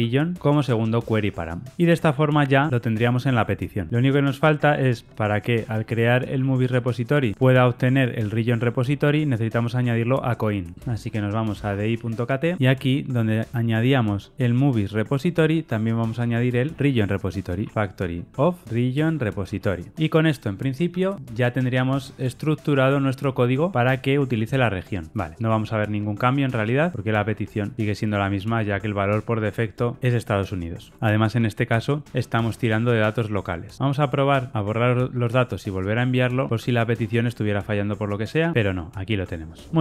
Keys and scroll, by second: 19.0 Return, 19.9 ctrl+r, 19.9 shift+F10.